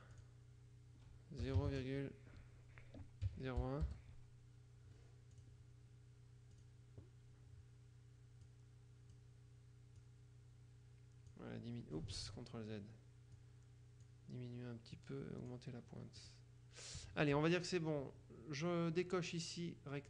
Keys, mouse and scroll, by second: 0.0 click, 1.5 KP_0, 1.7 KP_Decimal, 1.9 KP_0, 3.3 KP_1, 3.9 Return, 5.5 click, 6.7 click, 8.5 click, 10.1-11.9 drag, 12.3 ctrl+z, 13.5 click, 15.1 click, 16.3 click.